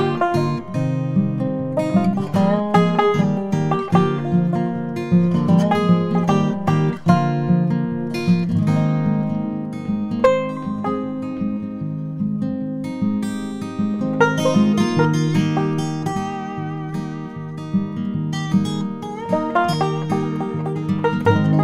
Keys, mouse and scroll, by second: 0.0 s, 5.1 e, 9.5 s, 14.1 e, 16.3 middle click, 18.0 Tab, 18.9 KP_Divide.